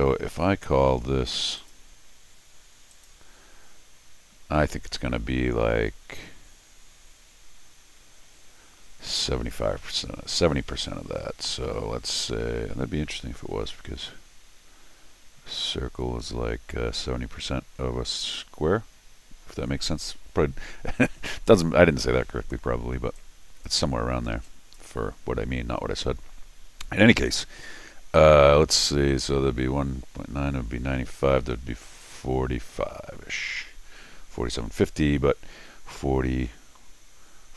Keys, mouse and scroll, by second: 1.6 click, 2.9 click, 23.1 click, 24.4 click.